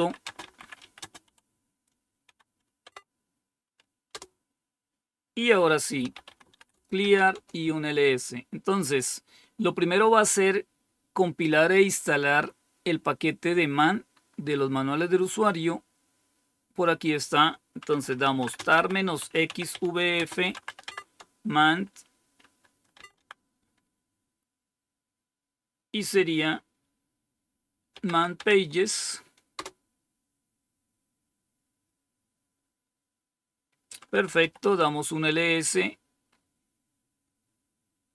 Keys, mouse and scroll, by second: 0.0-2.1 typing, 2.7 Tab, 4.0 Return, 5.7-7.1 typing, 14.1 scroll up 1, 14.9-15.7 scroll up 1, 15.7-16.9 scroll up 1, 16.9 click, 17.9-21.0 typing, 22.8 typing, 27.7-28.5 typing, 29.4 Return, 34.1-34.8 typing, 36.1-37.0 scroll up 1.